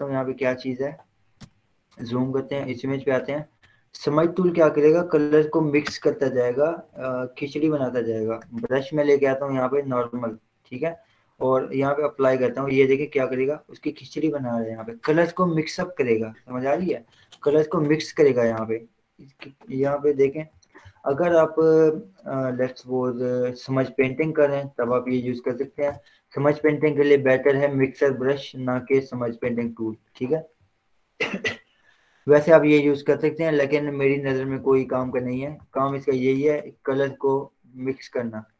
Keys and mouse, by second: 1.7 z, 2.9 click, 6.2 right click, 7.0 click, 8.9 right click, 10.3 click, 18.1 click, 20.4 ctrl+z, 21.1 ctrl+0, 25.2 ctrl+w, 25.8 Down, 29.7 right click, 32.8 click, 34.4-35.5 typing, 37.0 click.